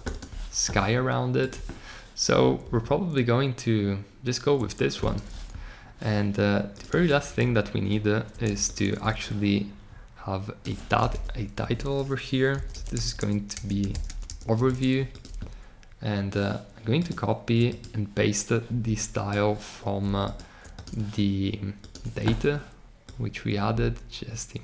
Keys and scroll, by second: 6.9 super+c, 12.4-14.7 typing.